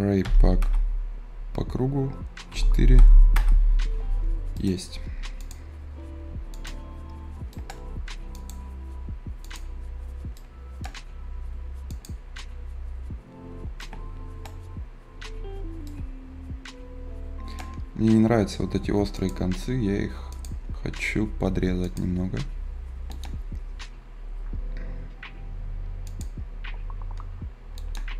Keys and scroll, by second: 0.5 Return, 2.4 d, 2.9 Return.